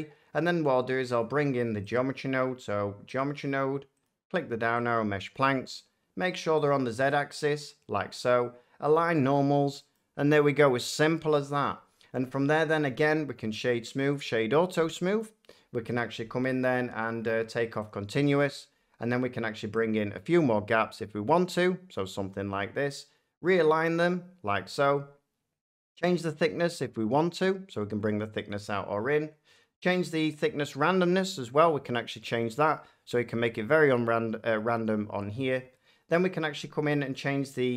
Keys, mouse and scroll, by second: 1.1 click, 1.8 click, 3.1 click, 4.0 click, 4.8 click, 6.6 click, 7.1 click, 8.9 click, 9.9 middle click, 11.9 middle click, 13.5-15.1 drag, 15.1-17.2 middle drag, 17.8-19.9 drag, 21.9-23.9 drag, 24.6 click, 28.4 click, 32.0 click, 32.6 middle click.